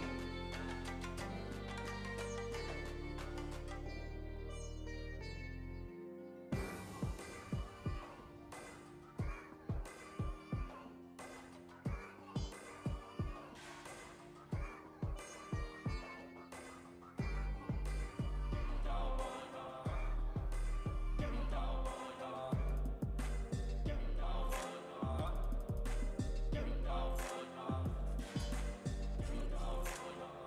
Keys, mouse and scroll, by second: 0.4-1.7 drag, 2.8 Tab, 3.1 click, 3.8 middle click, 4.5 KP_0, 4.8 g, 6.6 click, 8.7 middle click, 9.1 KP_0, 10.2 shift+d, 10.8-11.9 drag, 11.9 shift+d, 13.8 s, 15.2 g, 16.4 g, 17.5 middle click, 18.6 g, 19.4 KP_0, 20.4 click, 21.3 shift+d, 22.3 middle click, 23.3 g, 24.2 KP_0, 24.8 ctrl+z, 25.0 click, 25.7 g, 27.2-28.4 middle drag, 28.4 KP_0.